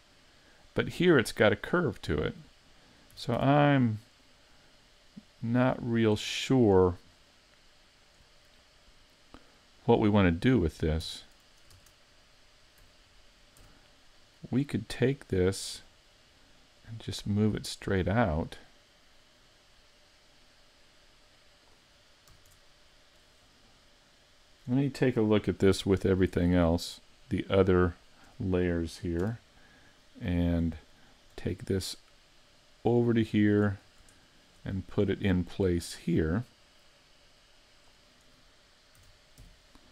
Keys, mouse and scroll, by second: 3.2 s, 4.3 click, 5.2 click, 11.1 Tab, 11.7 ctrl+Tab, 13.6 a, 14.3 right click, 16.8 click, 22.3 a, 22.5 Tab, 22.9-23.3 scroll down 4, 23.3 middle click, 27.4 shift+click, 27.9 shift+click, 29.2 KP_7, 30.4-30.9 scroll down 2, 30.9 shift+middle click, 32.6 click, 33.8 scroll up 5, 34.2 shift+middle click, 34.8-35.1 scroll up 1, 35.1 shift+middle click, 36.6 click, 39.0 s.